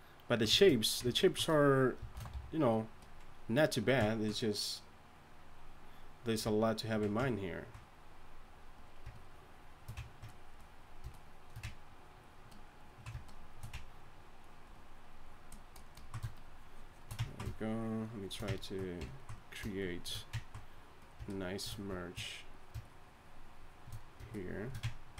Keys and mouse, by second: 2.3 shift+c, 2.7 f.